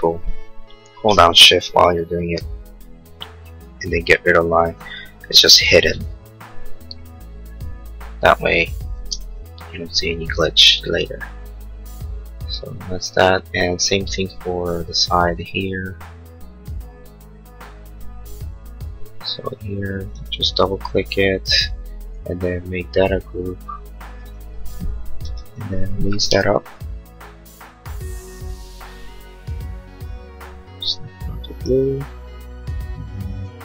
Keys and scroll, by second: 8.9 space, 9.2 Escape, 25.2 Escape, 26.4 m.